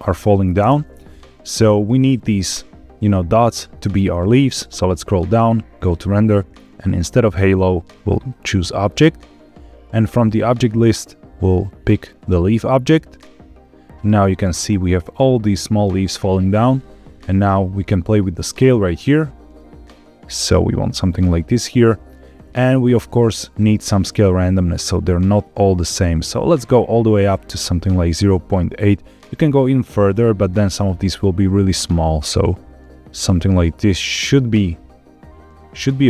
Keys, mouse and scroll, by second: 0.5 space, 4.4-5.1 scroll down 4, 5.7 click, 6.7-8.2 drag, 9.3-9.7 scroll down 3, 10.5-12.2 drag, 18.3-21.5 shift+drag, 23.5-30.3 drag, 31.6-35.9 drag.